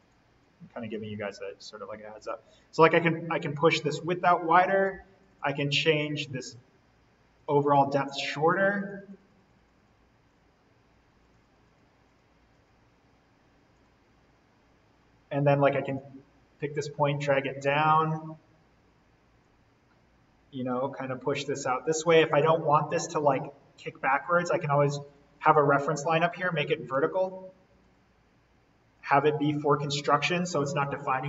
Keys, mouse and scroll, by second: 2.3 click, 4.0-5.1 scroll down 1, 5.1 click, 14.5-14.8 scroll down 1, 15.9-18.0 drag, 18.0-19.0 scroll down 1, 19.3-22.4 drag, 22.4-22.8 scroll up 1, 22.8 scroll down 1, 23.7 click, 26.9 Escape, 27.7 click.